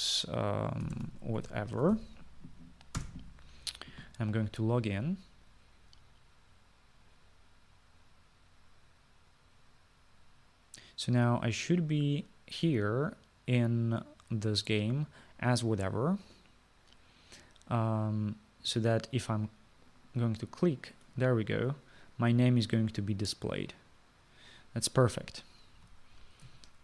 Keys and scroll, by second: 1.7-3.5 typing, 4.0 Return.